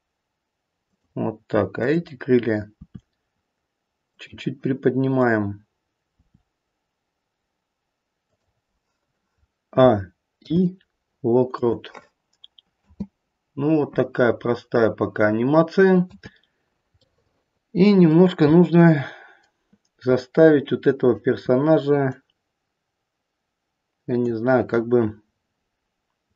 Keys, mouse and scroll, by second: 1.8 click, 2.7 r, 5.1 click, 6.1 r, 9.7-10.4 a, 10.4 i, 12.8 space, 16.1 space, 16.5-17.0 scroll up 2, 17.0 middle click, 18.6 middle click, 22.0 click.